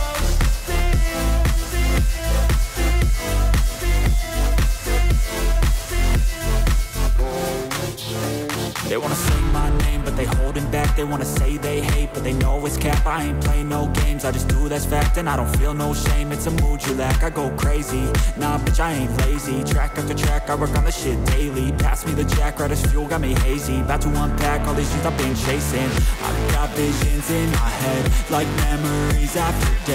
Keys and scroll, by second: 1.5 ctrl+j.